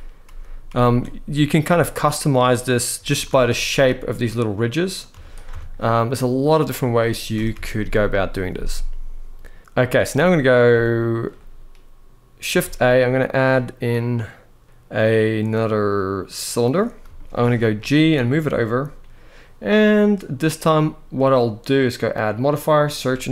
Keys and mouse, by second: 0.0 ctrl+z, 0.3 ctrl+z, 1.3 e, 2.6 s, 3.0 shift+x, 4.7 click, 4.8 z, 5.2 Tab, 5.8-6.1 middle drag, 7.1 KP_1, 7.3 alt+a, 9.6 shift+middle drag, 10.5-10.9 shift+middle drag, 12.3 shift+a, 16.8 shift+middle drag, 17.5 g, 21.8-23.3 drag.